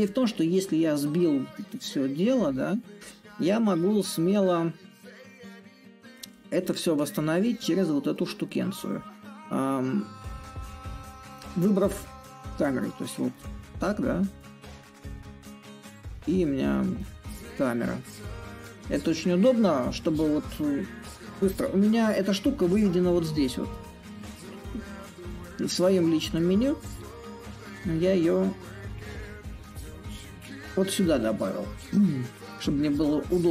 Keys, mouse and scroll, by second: 0.0-5.0 drag, 5.3-10.3 drag, 11.0-16.0 drag, 16.7-21.7 drag, 21.7 a, 23.1-26.8 drag, 26.8 a, 28.5-33.5 drag.